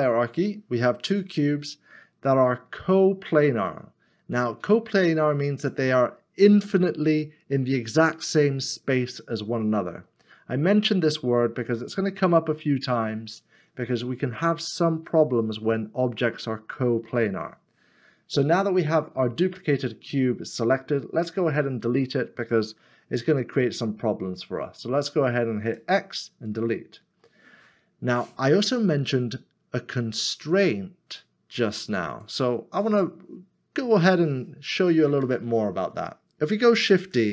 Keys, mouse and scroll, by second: 2.1 right click, 2.4 scroll up 1, 3.7 middle click, 8.3 middle click, 25.7 x, 27.0-27.4 scroll down 1, 30.6-32.8 scroll down 1, 35.3 middle click, 37.0 shift+d.